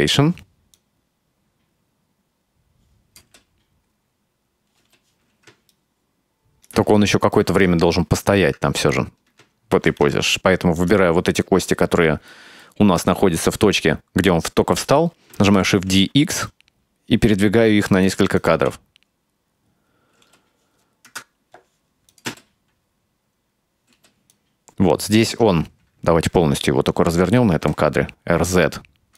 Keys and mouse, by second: 0.8-3.3 drag, 3.3 space, 4.9 space, 5.6 ctrl+middle click, 6.4 right click, 7.0 shift+middle click, 9.8 shift+d, 12.4-12.7 middle drag, 13.0 click, 13.9-14.8 middle drag, 15.6 shift+d, 18.4 click, 18.6 space, 20.3 space, 21.1 KP_0, 22.2 click, 22.3 space, 24.0 space, 24.4-25.3 drag, 27.6 r.